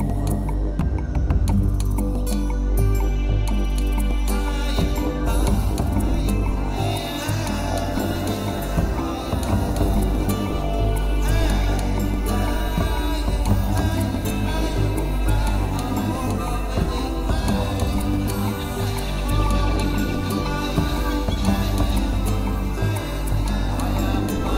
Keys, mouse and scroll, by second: 0.4 g, 3.9 click, 4.1 middle click, 5.2 Tab, 5.4 middle click, 6.9 ctrl+z, 7.3 ctrl+z, 7.5 ctrl+z, 7.9 middle click, 8.4 ctrl+z, 8.9 middle click, 9.5 middle click, 10.6 ctrl+z, 10.9 ctrl+z, 11.5 ctrl+z, 11.8 ctrl+z, 12.2 middle click, 12.7 middle click, 13.2 ctrl+z, 13.7 ctrl+z, 14.0 ctrl+z, 15.9 ctrl+z, 16.4 ctrl+z, 16.6 ctrl+z, 16.9 ctrl+z, 17.5 ctrl+z, 18.6 click, 18.7 g, 20.0 right click, 20.2-20.6 scroll down 8, 20.5 middle click, 22.2 Tab, 22.4 scroll up 6, 22.9 middle click.